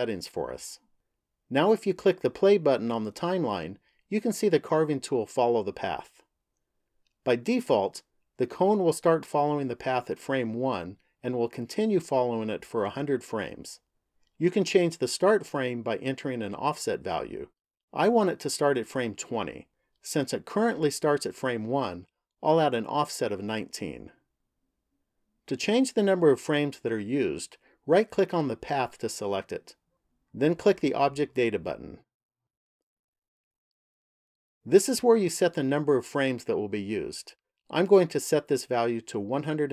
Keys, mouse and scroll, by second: 3.0 click, 8.4 click, 21.7 click, 27.7 right click, 31.6 click, 33.6 click, 37.8 click.